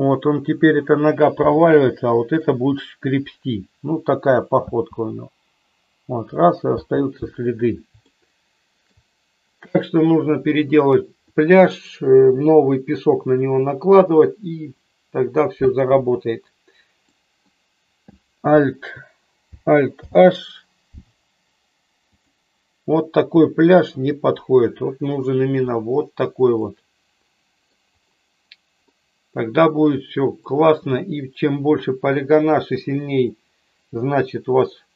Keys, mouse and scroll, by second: 1.6-2.5 shift+middle drag, 4.5 space, 6.9 space, 8.1-9.0 shift+middle drag, 17.1-17.6 middle drag, 20.0 alt+h, 26.6-28.1 middle drag, 29.0-30.6 middle drag.